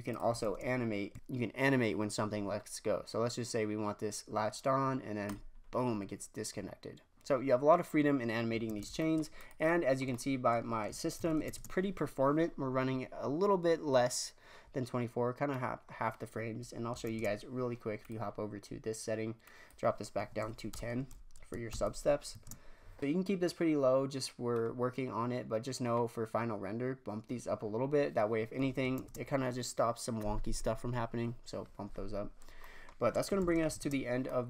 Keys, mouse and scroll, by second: 0.1 click, 0.3 shift+space, 5.3 Left, 7.3-8.3 scroll down 3, 8.6 shift+space, 9.3 click, 9.6-11.1 middle drag, 11.1 shift+Left, 11.4 shift+space, 15.6 middle click, 15.9-16.3 scroll up 2, 17.1 shift+space, 17.9 click, 19.4-21.6 drag, 21.6 shift+Left, 22.3 shift+space, 24.5-27.6 middle drag, 27.8-28.3 scroll down 4, 28.9 shift+space, 32.5 scroll down 1, 32.6 middle click, 33.3 shift+Left, 33.7 shift+space, 34.3 middle click.